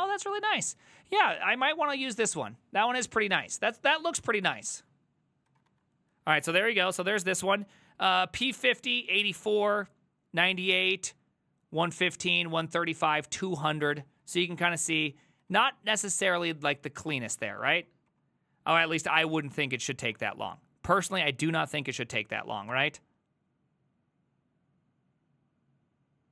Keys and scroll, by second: 2.1 alt+{, 4.0 ctrl+a, 4.2 3, 4.5 ctrl+c, 4.6 ctrl+c, 4.7 ctrl+c, 5.5 ctrl+a, 5.7 2, 6.2 ctrl+a, 14.9 ctrl+c, 15.0 ctrl+c, 15.2 ctrl+c, 15.5 ctrl+a, 15.7-18.2 typing, 16.3 ctrl+c, 18.8 Return, 19.4 ctrl+a, 19.7 2, 20.2 Up, 22.7 Return.